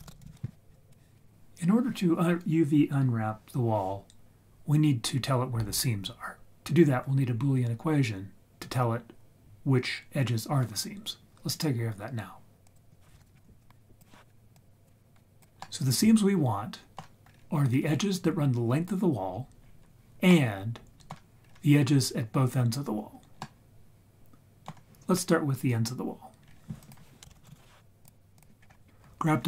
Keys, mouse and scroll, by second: 0.3 l, 0.7 click, 12.6 click, 12.9 click, 13.2 ctrl+click, 13.2 ctrl+right click, 13.6 scroll down 2, 14.0 click, 14.5 click, 15.0 scroll down 1, 15.4 click, 15.6-17.0 middle drag, 17.0 scroll down 1, 17.3-17.9 scroll up 2, 17.9-18.5 scroll up 1, 19.6-20.1 scroll down 3, 20.3-21.1 middle drag, 21.4-22.8 scroll up 2, 23.4-24.7 middle drag, 26.4-26.8 scroll up 2, 26.8 click, 27.2 ctrl+shift+z, 27.3 shift+a, 28.6-29.4 scroll up 2.